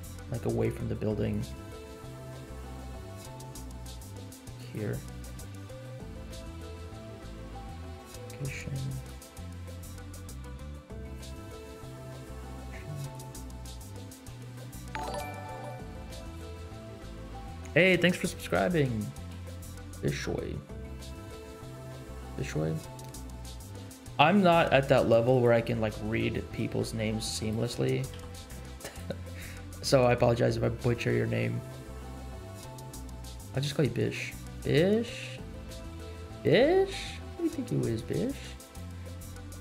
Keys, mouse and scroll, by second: 1.7 r, 2.6 g, 7.1 i, 8.9-9.5 drag, 9.7 g, 11.5 i, 13.1 click, 14.3 g, 24.5 g, 26.7 g, 28.1 i, 30.6-31.1 scroll up 4, 31.3 middle click, 31.9 scroll up 2, 32.2 middle click, 33.1 scroll down 3, 33.8 middle click, 34.3-34.7 scroll down 2, 35.3-35.6 scroll down 3, 35.6 middle click, 37.9-38.8 drag, 39.0 click, 39.3 scroll down 2.